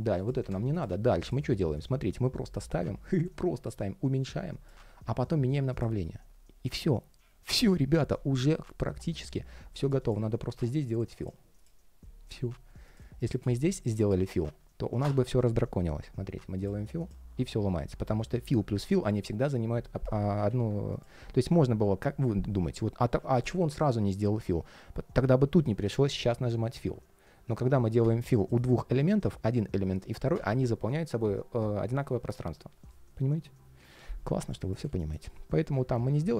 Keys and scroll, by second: 1.2 ctrl+shift+4, 20.2 super+z, 36.2 ctrl+shift+4.